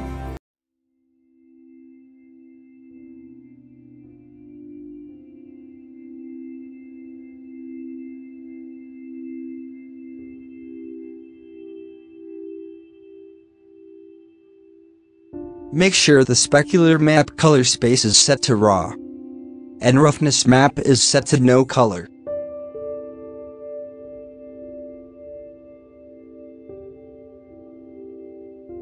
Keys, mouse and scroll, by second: 0.6 scroll down 5, 2.9-3.2 scroll up 4, 3.2 click, 5.9 scroll down 6, 6.2 middle click, 6.4 scroll up 2, 7.5 scroll up 2, 8.7-10.6 drag, 10.6 middle click, 11.3-11.8 scroll down 1, 11.8 scroll up 1, 12.1 middle click, 13.0 click, 13.8 alt+a, 14.2-14.6 drag, 14.6-15.5 middle drag, 15.5 scroll down 6, 16.4 click, 16.5 scroll up 4, 17.0-18.3 drag, 18.3 scroll down 6, 18.5 middle click, 18.7-19.2 scroll up 7, 19.0 middle click, 19.5-20.3 middle drag, 20.3-21.0 drag, 21.7-22.8 drag, 22.8 z, 24.2-24.8 scroll down 1, 24.8 scroll up 2, 25.5-27.2 scroll down 2, 27.2 click, 27.2 shift+middle click, 27.3 shift+scroll down 2, 27.5-27.9 scroll up 1, 28.0 scroll down 2.